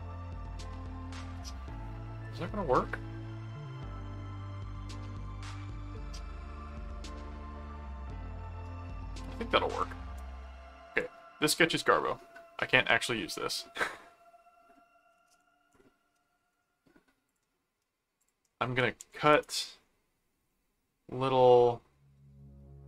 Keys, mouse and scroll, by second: 10.9 click, 17.3 click, 18.2 click, 19.3 Return, 20.5 ctrl+middle click.